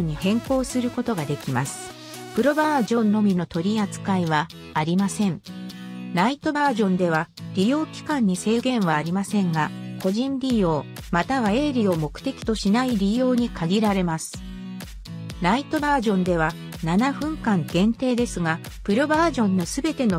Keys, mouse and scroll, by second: 7.6-11.1 drag, 17.1 click, 17.9 Num_Lock, 17.9 click, 18.7 right click.